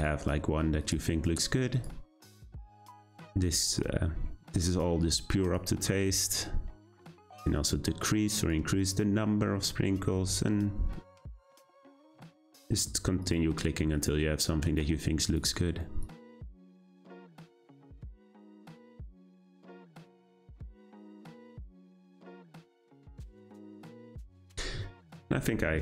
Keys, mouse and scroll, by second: 10.8 scroll down 1, 12.4-25.8 drag.